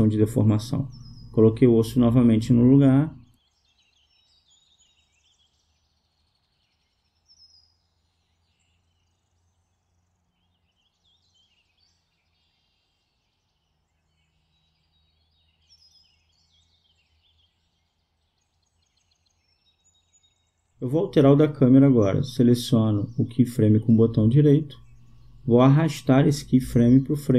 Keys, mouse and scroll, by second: 1.1 g, 11.7 a, 13.5-15.6 drag, 21.2 click, 24.2 right click, 26.8 g.